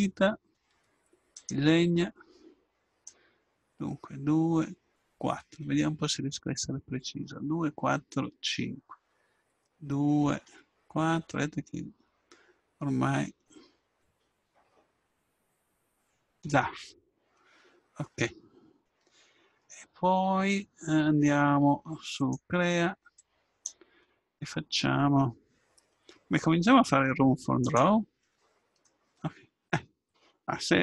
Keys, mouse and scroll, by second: 22.2-24.9 drag, 27.6-29.6 drag, 28.8 middle click, 29.6-30.8 middle drag.